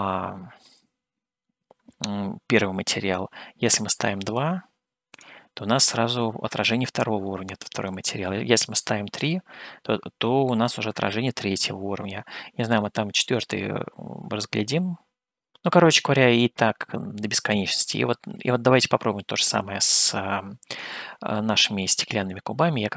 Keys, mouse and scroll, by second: 4.3-10.7 drag, 11.1-12.7 middle drag, 13.3-13.8 scroll up 3, 15.5 scroll down 2, 16.2 scroll down 2, 16.9-21.4 middle drag.